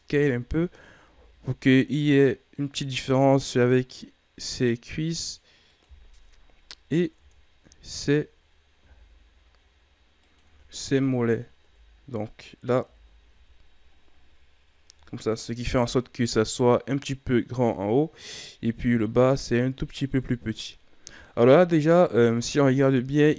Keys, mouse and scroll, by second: 0.0 o, 1.0 s, 7.1 Tab, 7.8 Tab, 8.7 s, 10.5 Tab, 11.6 KP_Divide, 12.8 KP_1, 13.3 a, 14.0-14.6 scroll down 8, 15.1-16.8 shift+scroll up 6, 16.8-18.7 scroll up 2, 18.7 KP_3, 20.1 KP_1, 21.5 KP_3, 23.2-23.3 scroll up 1.